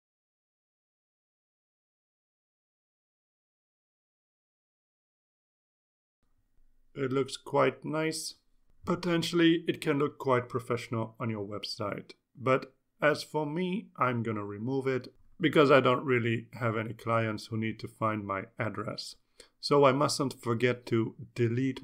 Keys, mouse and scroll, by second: 0.0-1.2 typing, 3.0 click, 3.6 click, 4.2 click, 5.5 click, 6.1-6.8 scroll down 4, 7.5-7.9 scroll down 2, 9.2-21.8 drag.